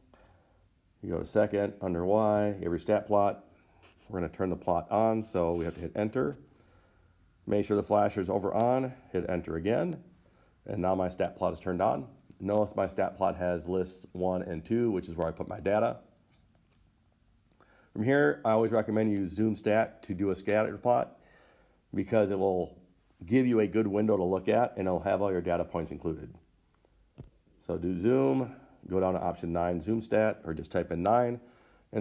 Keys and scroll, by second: 6.6 Return, 9.5 Return, 30.1 9.